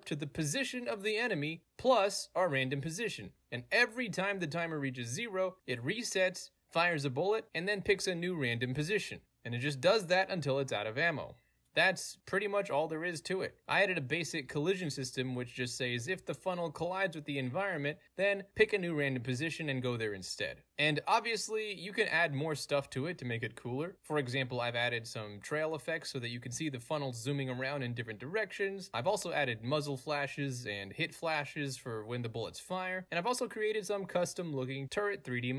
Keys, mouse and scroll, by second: 0.1 right click, 0.9 click, 1.9 click, 2.7 click, 3.3 click, 3.4 right click, 3.8 click, 4.4 right click, 5.4 click, 5.4 right click, 6.0 click, 6.4-6.8 scroll up 1, 6.8-7.9 right drag, 8.6 right click, 8.7 click, 9.5 right click, 10.3 right click, 12.0-13.0 right drag, 13.0 middle click, 13.0-13.6 scroll down 2, 13.6 right click, 14.9 right click, 16.6 right click, 18.3 right click, 19.9 right click, 21.6 right click, 23.0 right click, 24.0 click, 24.8 click, 25.1-25.9 drag, 26.0-30.7 drag, 30.8 alt+right click, 31.5-34.8 alt+drag.